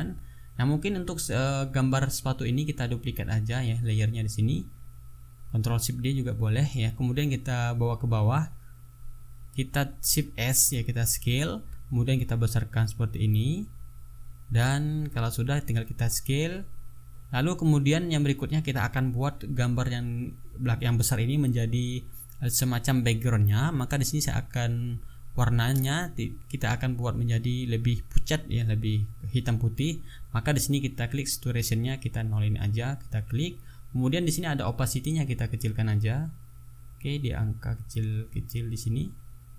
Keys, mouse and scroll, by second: 1.9 right click, 5.1 click, 6.7 click, 10.0 shift+s, 11.5-15.3 drag, 16.9 click, 20.3-21.6 drag, 25.2 click, 27.1 click, 30.0 click, 32.8 click, 35.0-39.5 drag.